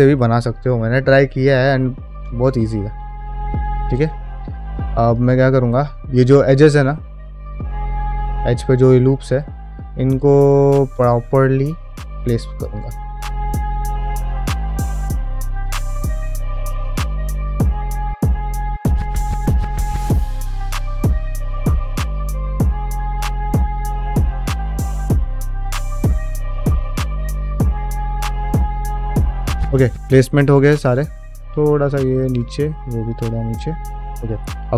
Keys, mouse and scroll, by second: 0.0 middle click, 1.0 middle click, 2.4 shift+middle click, 3.0 ctrl+middle click, 3.4 ctrl+Tab, 3.8 shift+middle click, 4.3 Tab, 5.0 alt+click, 5.3-8.0 middle drag, 8.7 middle click, 9.7-11.0 middle drag, 11.2 ctrl+middle click, 11.7 click, 12.0 g, 12.6 click, 12.7 g, 13.1 middle click, 13.4 click, 13.5 g, 13.7 shift+middle click, 14.0 middle click, 14.2 shift+middle click, 14.7 ctrl+middle click, 14.9 ctrl+middle click, 15.1 click, 15.2 middle click, 15.4 g, 15.7 click, 15.8 g, 16.0 middle click, 16.2 middle click, 16.4 middle click, 16.9 g, 17.2 click, 17.5 middle click, 17.9 middle click, 18.1 click, 18.2 g, 18.9 middle click, 19.1 middle click, 19.3 shift+middle click, 19.6 click, 19.7-22.8 typing, 20.0 click, 20.4 middle click, 20.6 click, 20.9 middle click, 21.1 click, 21.6 middle click, 21.8 middle click, 22.0 click, 22.5 middle click, 22.8 click, 23.1 click, 23.4 shift+middle click, 23.6 middle click, 23.8 click, 23.9-28.8 typing, 24.1 shift+middle click, 24.3 middle click, 24.5 click, 24.8 shift+middle click, 25.0 middle click, 25.4 middle click, 25.6 click, 25.8 shift+middle click, 25.9 middle click, 26.2 click, 26.8 click, 27.1 shift+middle click, 27.5 click, 28.0 middle click, 28.1 shift+middle click, 28.3 middle click, 28.5 click, 28.8 shift+click, 29.0 shift+middle click, 29.1 middle click, 29.6 ctrl+middle click, 29.9 middle click, 30.6 shift+middle click, 31.2 click, 31.4 shift+g, 32.0 click, 32.2 g, 32.6 middle click, 33.0 shift+middle click, 33.3 middle click, 33.7 ctrl+middle click, 33.9 middle click, 34.2 2, 34.6 alt+click.